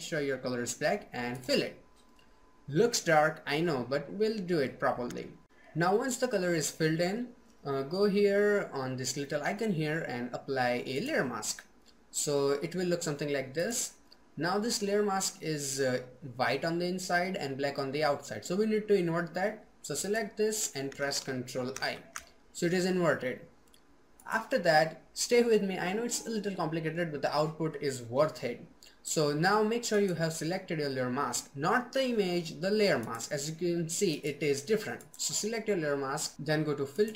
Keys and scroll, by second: 20.8 ctrl+i.